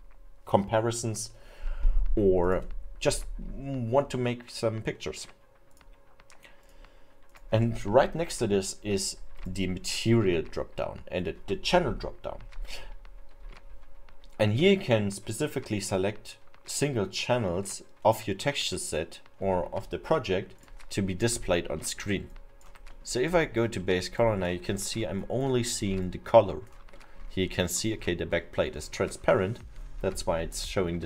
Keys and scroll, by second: 28.8 alt+7.